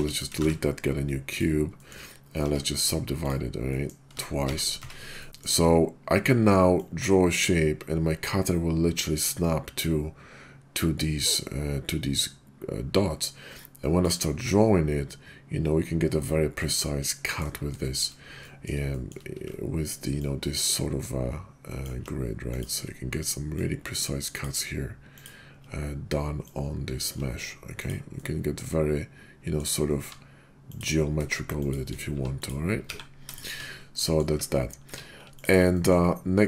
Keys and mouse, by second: 0.4 shift+a, 1.8 click, 2.4 Tab, 2.7 click, 3.6 click, 4.3 shift+r, 4.7 Tab, 5.2 middle click, 6.7-14.0 ctrl+drag, 16.7 click, 17.2 middle drag, 18.4 middle click, 20.2-21.8 ctrl+drag, 22.5 click, 23.5-24.4 ctrl+drag, 25.1 click, 26.4-27.1 ctrl+drag, 27.8 click, 28.2-29.6 middle drag, 30.0 q, 31.6 shift+click, 32.1 q, 32.9 1, 33.3 shift+click, 34.0 middle drag, 34.3 `, 34.8 q, 35.7 middle drag.